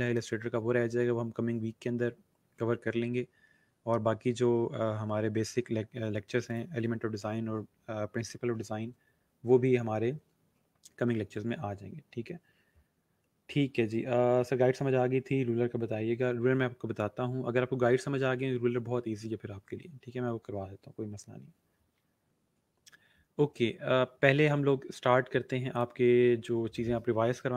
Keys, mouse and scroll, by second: 6.4 click, 25.7 click.